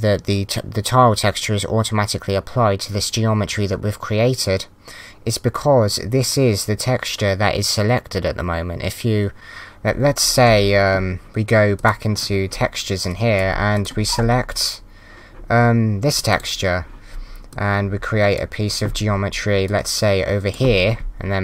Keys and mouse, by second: 11.8 click, 13.1 click, 16.1 click, 17.5 click, 19.7 click.